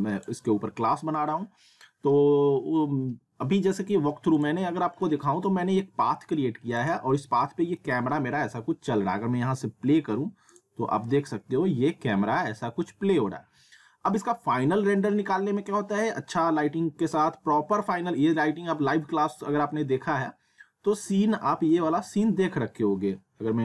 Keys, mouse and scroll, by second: 0.0 click, 4.4 click, 5.2 alt+w, 6.8 click, 7.3 middle click, 7.9 w, 10.5 click, 21.0 alt+Num_Lock.